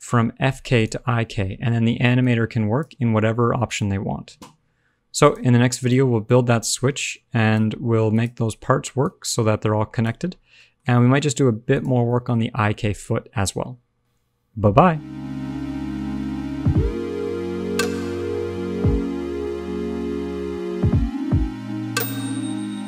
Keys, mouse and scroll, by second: 2.1 click, 3.6 click, 4.4-5.1 scroll up 1, 5.1 click, 5.7 click, 6.9 click, 8.1 click, 9.0 click, 10.3 scroll down 4, 10.5 middle click, 10.7-11.6 scroll up 3, 10.9 middle click, 11.6 click, 12.0 middle click, 12.8 a.